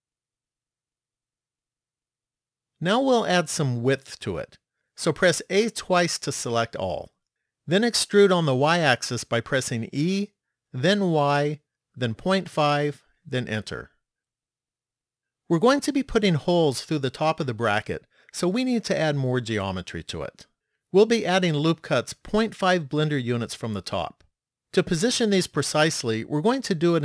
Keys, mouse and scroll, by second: 1.2 middle click, 6.2 a, 6.7 a, 9.8 e.